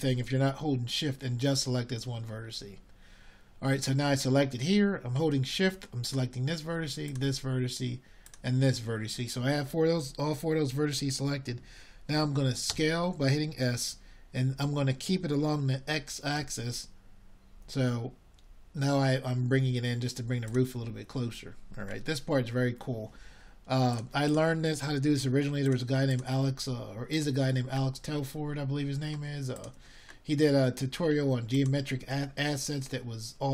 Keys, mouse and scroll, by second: 19.3 s, 27.5-29.1 middle drag, 30.7-33.5 middle drag.